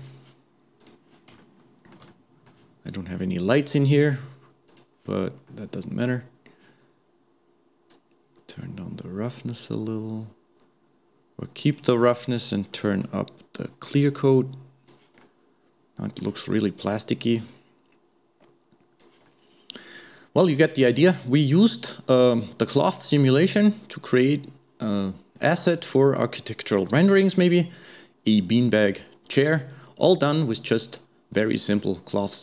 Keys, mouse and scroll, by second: 1.0 click, 1.4-4.7 shift+middle drag, 4.7 click, 5.5-7.9 middle drag, 7.9-10.9 drag, 12.7 middle click, 13.7-15.2 drag, 15.2-17.5 middle drag, 17.5-19.3 drag, 19.3-24.2 middle drag, 27.3-30.3 middle drag, 30.5-30.8 scroll down 1, 30.8-31.8 scroll up 1, 31.8-32.4 scroll up 1.